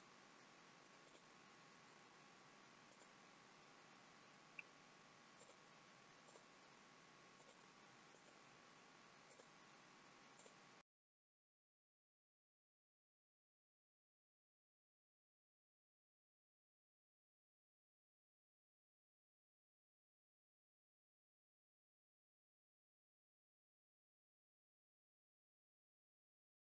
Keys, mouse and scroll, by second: 1.1 shift+click, 2.8 right click, 6.2 click, 7.3 shift+click, 8.1 right click, 10.4 click, 10.9 shift+click, 11.0 right click, 11.3 shift+middle click, 11.5 scroll down 4, 11.6 shift+middle click, 11.9 click, 12.1 shift+click, 12.2 right click, 12.7 shift+click, 13.0 right click, 13.3 shift+middle click, 13.5 click, 13.6 shift+click, 13.9 right click, 14.3 click, 14.4 shift+click, 14.7 right click, 15.5 click, 15.7 shift+click, 15.8 right click, 16.6 click, 16.7 shift+click, 16.8 right click, 17.5 shift+middle click, 17.6 click, 17.8 shift+click, 18.0 right click, 18.5 scroll down 6, 18.7 shift+middle click, 18.9 Tab, 18.9-19.3 scroll up 3, 19.3 middle click, 19.6 click, 19.9 middle click, 20.5 middle click, 20.8 middle click, 20.9 middle click, 20.9-21.4 scroll up 2, 21.6 click, 22.2 Tab, 22.2 click, 22.6 middle click, 22.6 scroll down 2, 22.7 middle click, 22.9 middle click, 23.6 click, 23.6 middle click, 23.8-24.3 scroll up 2, 24.0 shift+click, 24.1 shift+middle click, 24.3 shift+middle click, 24.5 shift+click, 24.7 shift+click, 24.9 shift+click, 24.9 middle click, 25.1 shift+click, 25.3 shift+click, 25.7 shift+click, 25.7 middle click, 26.0-26.4 scroll down 2, 26.4 middle click.